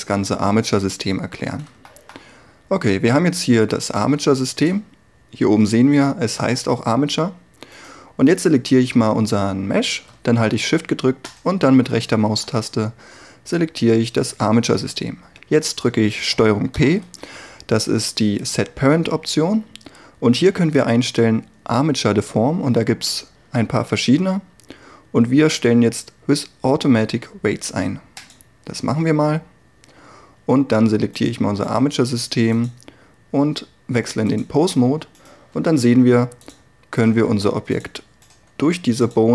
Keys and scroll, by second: 16.8 ctrl+p, 35.6 r.